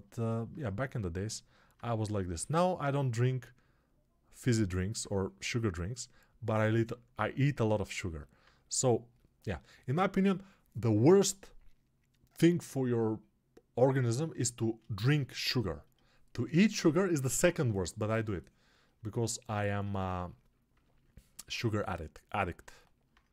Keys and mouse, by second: 19.8 alt+q.